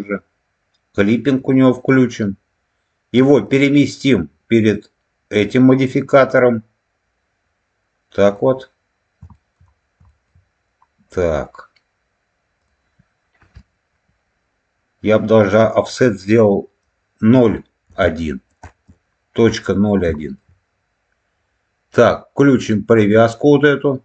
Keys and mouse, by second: 1.2 click, 3.4-6.1 drag, 8.2 click, 9.2 shift+middle click, 10.0 shift+middle click, 12.5-18.9 drag, 20.1 shift+middle click, 22.9 click.